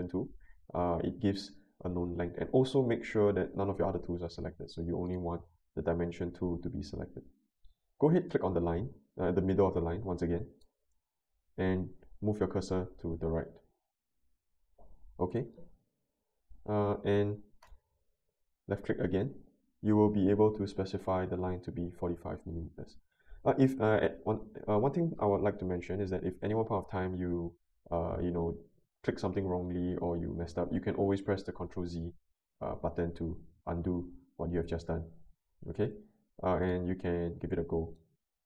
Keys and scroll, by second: 20.7-21.6 typing, 31.3 ctrl+z, 32.0 ctrl+z, 33.1 ctrl+z.